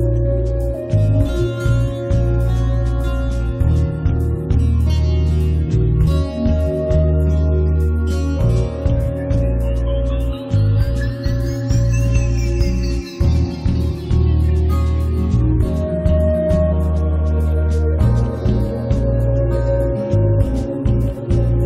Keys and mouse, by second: 0.0-1.1 typing, 0.6 click, 1.3 middle click, 1.6 click, 2.4 middle click, 2.5-6.4 drag, 7.2-8.4 drag, 8.4 right click, 8.5-9.7 drag, 9.8 middle click, 10.3-14.6 drag, 14.4 right click, 14.6-16.6 middle drag, 15.8 g, 15.9 f, 16.7 middle click, 17.3-18.3 middle drag, 17.7 click, 18.5 middle click, 18.7 1, 18.9 f, 19.5 f, 19.9-21.6 drag.